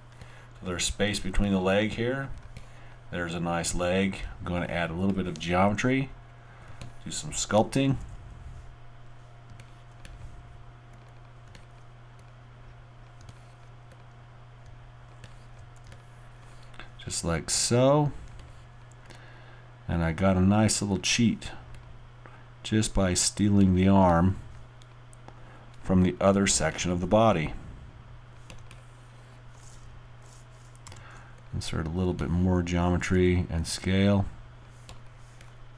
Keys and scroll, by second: 7.9 alt+r, 9.2 r, 15.6 alt+w, 15.9 alt+w, 30.9 alt+y, 31.9 y, 33.0 alt+r, 33.9 alt+r.